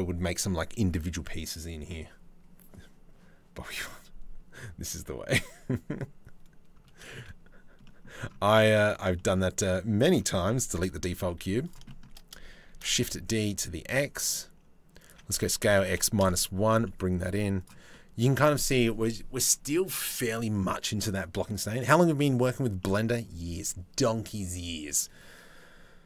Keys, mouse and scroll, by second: 6.7 shift+a, 8.5 click, 8.8 shift+click, 9.0 middle click, 10.4 KP_7, 11.0 z, 12.3 shift+d, 15.0 s, 16.5 middle click, 17.0 z, 17.5 middle click, 22.4 middle click.